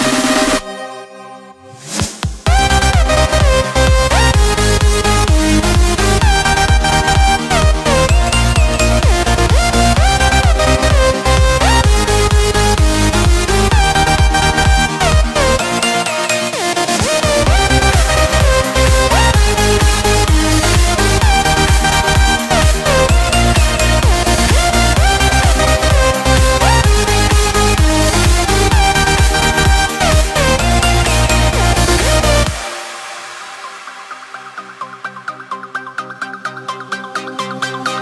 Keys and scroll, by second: 0.5 ctrl+space, 1.4 ctrl+v, 4.6 ctrl+space, 9.7 ctrl+x, 12.0 ctrl+v, 12.6 ctrl+space, 21.7 ctrl+space, 27.7 ctrl+space, 32.0 ctrl+x, 33.6 ctrl+v, 36.8 ctrl+space.